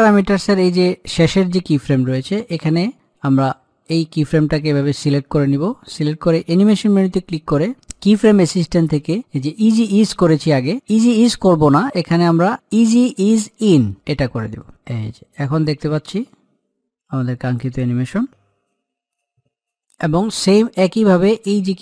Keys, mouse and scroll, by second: 4.7-6.8 drag, 14.8-20.0 drag, 20.8-21.8 drag.